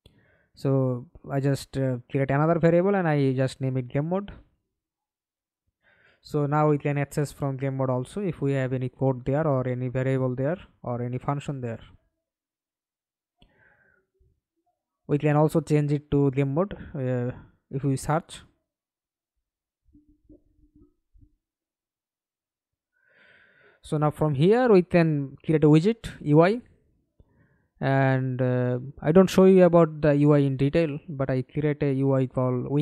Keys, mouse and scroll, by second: 0.0-1.2 typing, 1.3 Return, 4.5 right click, 10.7-12.8 typing, 15.2-16.2 scroll down 3, 16.2-16.6 scroll down 1, 18.5 right click, 19.1 right click, 19.7-20.5 scroll up 6, 22.0-23.8 typing, 24.0 Return, 25.0 right click, 29.5 right click, 30.4 right click.